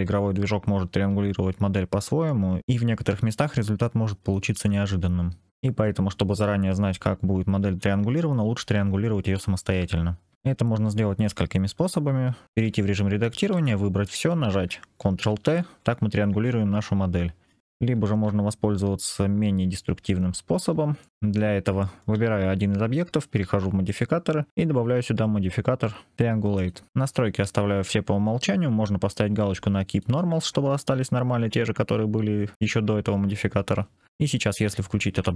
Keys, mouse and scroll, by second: 12.5 Tab, 13.4 a, 15.2 ctrl+t, 18.0 ctrl+z, 19.9 Tab, 20.9-21.4 middle drag, 21.0 c, 21.5-21.9 shift+middle drag, 23.7 click, 24.5 click, 29.8 click, 34.9 ctrl+/.